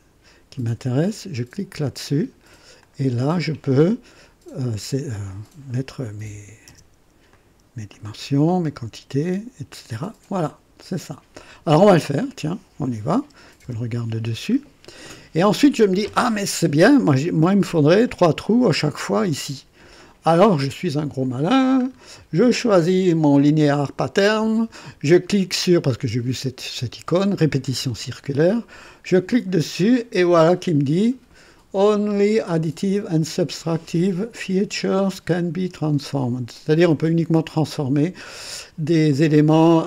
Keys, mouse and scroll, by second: 1.6 click, 2.8-3.5 drag, 5.2 click, 6.2 KP_1, 6.6 KP_0, 7.3 click, 7.9 click, 8.7 scroll up 1, 12.1 click, 13.6 KP_2, 14.5 scroll up 1, 15.0-15.8 right drag, 21.8 scroll down 1, 23.4 click, 29.3 click.